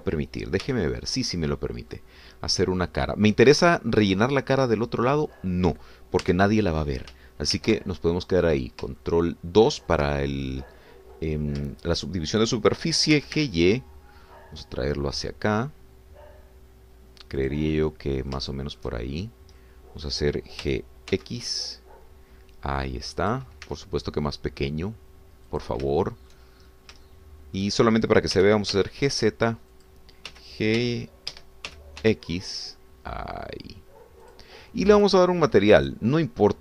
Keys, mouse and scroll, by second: 0.2 shift+click, 0.8 shift+click, 1.6 shift+f, 2.4 click, 3.2-3.8 scroll down 1, 5.1-7.2 drag, 7.3 Tab, 8.5 ctrl+2, 9.5-9.8 scroll down 1, 10.0-11.1 shift+middle drag, 11.4 shift+middle click, 12.7 shift+middle click, 14.1 g, 14.3 y, 18.4 click, 18.7 middle click, 19.4 shift+click, 19.5 shift+click, 20.2 shift+middle click, 20.4 scroll down 1, 20.6 middle click, 21.6 g, 22.1 x, 24.2 click, 24.7 s, 26.5 click, 26.9 shift+middle click, 27.6-28.0 shift+scroll up 4, 28.1 shift+middle click, 29.3 g, 29.7 z, 30.8 click, 31.3 g, 31.8 y, 32.3 Escape, 32.7 g, 33.0 x, 35.3 click.